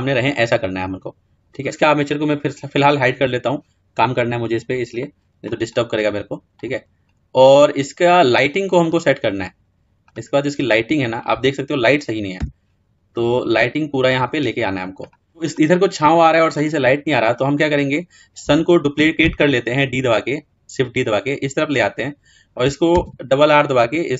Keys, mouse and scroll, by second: 0.4-1.2 scroll up 3, 1.2 middle click, 3.0 click, 6.9-7.8 scroll down 2, 7.8-8.7 scroll up 1, 8.7-9.9 scroll down 2, 9.9-14.8 drag, 14.9-17.3 scroll down 4.